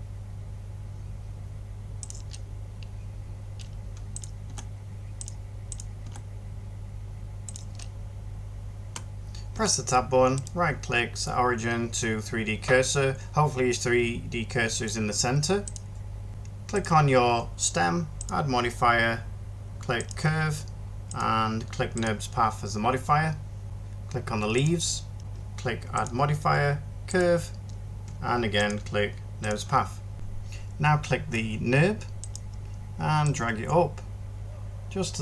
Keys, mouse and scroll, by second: 4.3 g, 5.9 g, 8.9 Tab, 9.4 Tab, 30.1 ctrl+shift+z.